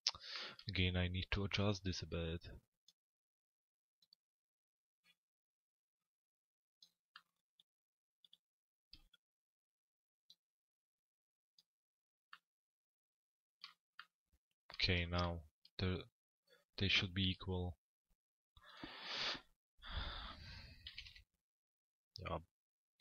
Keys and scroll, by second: 20.5 t, 21.1 z.